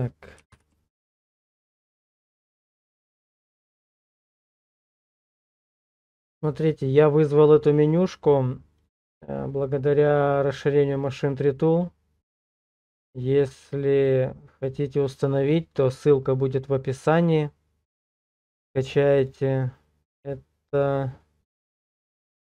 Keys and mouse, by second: 0.5 Page_Down.